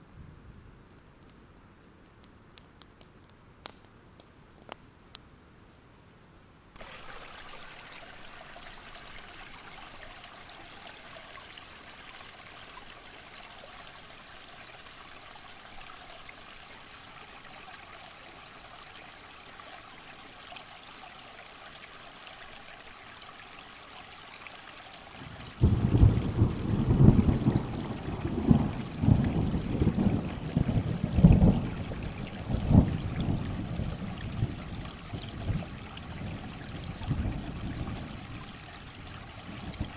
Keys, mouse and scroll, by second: 2.1 alt+scroll up 1, 2.4-4.9 drag, 6.4 alt+scroll up 1, 7.2-12.9 drag, 13.1 alt+scroll down 1, 13.4 ctrl+scroll up 1, 15.6 alt+scroll down 1, 15.8 click, 16.3 alt+scroll up 1, 16.5-20.9 drag, 22.0 alt+scroll down 1, 22.1-22.6 scroll up 2, 22.9-23.2 scroll up 1, 23.3-23.9 ctrl+scroll down 2, 24.1-25.4 alt+scroll up 2, 25.4 click, 30.3 alt+scroll down 1, 30.4 alt+scroll up 1, 30.8 shift+click, 31.9 click, 32.6 alt+scroll down 1, 33.2 click, 34.1 alt+scroll up 1, 34.6 alt+click, 35.5-35.8 alt+scroll up 2, 35.8 shift+click, 37.1 click, 39.1 Delete, 39.4 click.